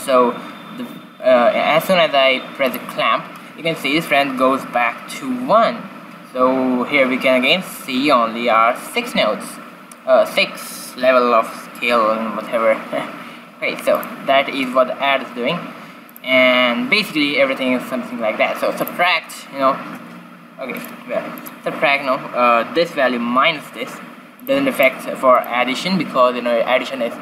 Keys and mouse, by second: 2.6-4.5 drag, 13.9-15.6 drag, 16.0-17.8 drag, 20.7-22.5 drag, 24.3-26.4 drag.